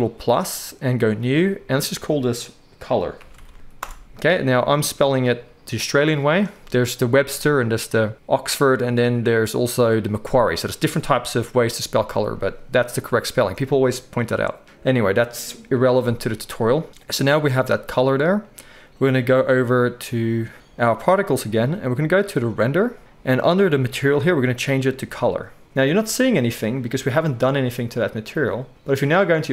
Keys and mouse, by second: 20.8-24.2 right drag, 24.2-29.5 middle drag.